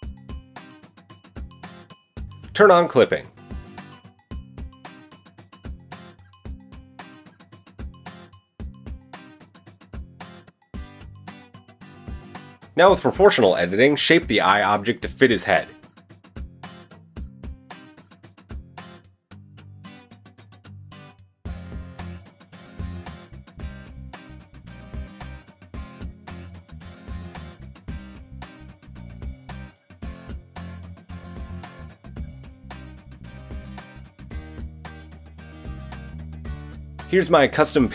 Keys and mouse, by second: 3.3-6.8 middle drag, 4.1 a, 6.8 click, 6.9-9.7 shift+middle drag, 9.7 click, 10.1-13.4 middle drag, 13.4-19.5 drag, 19.5-29.7 middle drag, 19.5 g, 25.7 ctrl+z, 28.6 g, 29.7-37.4 drag, 35.3 Tab, 36.4 shift+s, 37.4-37.9 middle drag.